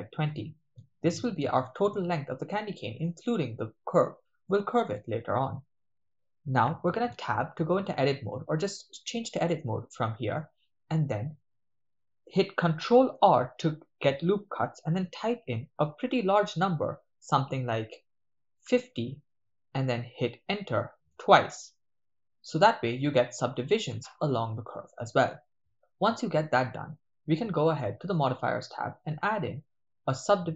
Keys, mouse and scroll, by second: 0.3 Return, 1.2-1.6 ctrl+middle drag, 4.6 shift+middle drag, 7.1 Tab, 9.3 click, 12.9 ctrl+r, 21.1 Return, 22.5 Tab, 23.6 Tab, 25.7 Tab, 27.8 click, 29.0-30.5 drag.